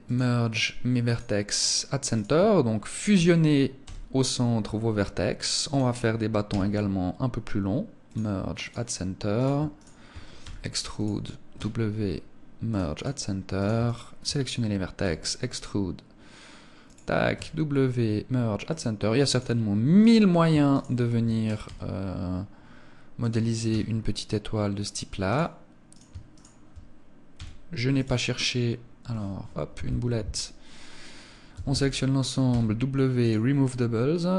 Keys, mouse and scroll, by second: 1.5 right click, 2.3 shift+right click, 3.2 e, 5.1 click, 5.9 w, 8.7 right click, 9.1 shift+right click, 9.8 e, 10.5 click, 10.9 w, 13.0 right click, 13.3 shift+right click, 14.4 e, 16.3 click, 16.7 w, 19.4 right click, 20.1 shift+right click, 22.7 click, 23.1 w, 25.3 right click, 25.7 shift+right click, 26.7 w, 28.7 Escape, 31.1 a, 31.9 w, 34.0 right click.